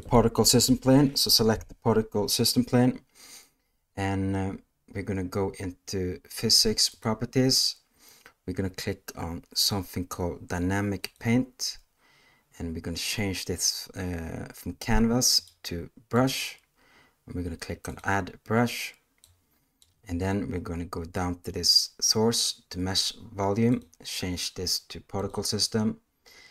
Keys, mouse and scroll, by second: 6.9 click, 11.0 click, 15.4-16.3 drag, 23.6-25.3 drag.